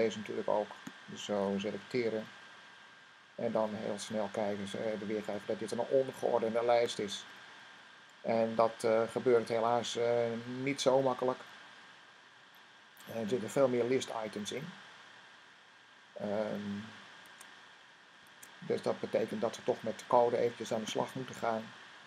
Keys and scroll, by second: 17.1 Tab, 18.2 Tab.